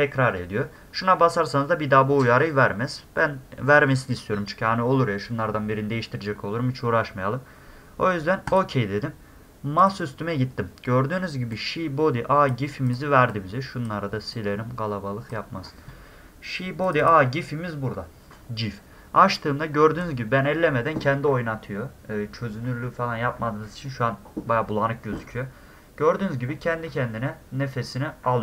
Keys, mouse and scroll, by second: 8.5 click, 9.8 click, 11.5 click, 12.9 click, 13.3 click, 14.3 click, 16.8 click, 17.0 click, 18.4-18.9 scroll up 6, 19.1 scroll down 2, 19.1-19.6 scroll up 4, 19.7-25.6 middle drag, 26.1 middle click, 26.2 middle click.